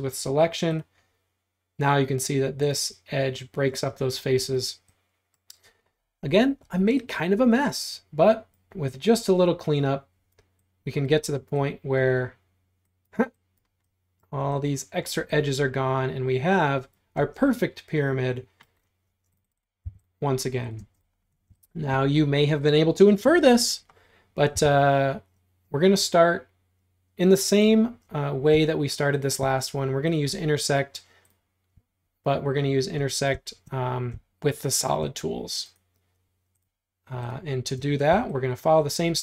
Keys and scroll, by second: 6.7 e, 17.2 space, 18.9 space, 19.1 space, 19.9 m, 20.8 space, 24.6 l, 37.8 space, 38.2 e.